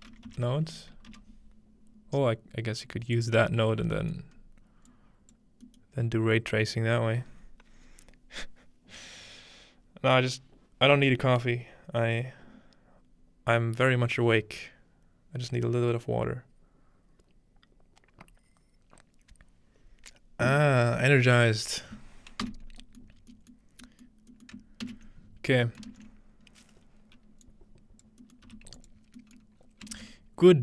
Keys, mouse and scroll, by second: 0.0-0.3 typing, 1.1 Return, 3.2-5.7 drag, 4.1-5.7 scroll up 2, 22.1-22.5 scroll down 1, 22.5 x, 23.3-24.8 scroll up 2, 24.9 ctrl+s, 25.2-26.5 scroll down 1, 25.7-26.4 typing, 26.5-27.6 scroll up 3, 27.5-29.1 ctrl+drag, 28.5 g, 29.0-30.6 scroll down 1, 29.3 click, 30.0 ctrl+space.